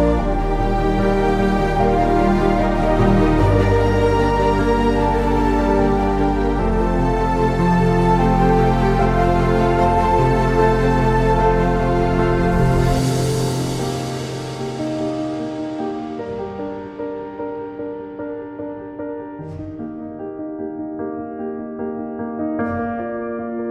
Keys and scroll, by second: 1.9 ctrl+z, 3.0-6.5 typing, 8.6-9.5 typing, 10.7-11.8 typing, 12.9 ctrl+z, 13.5 ctrl+z, 13.5-15.1 typing, 14.3 ctrl+z, 16.5-20.5 typing, 21.8-23.7 typing.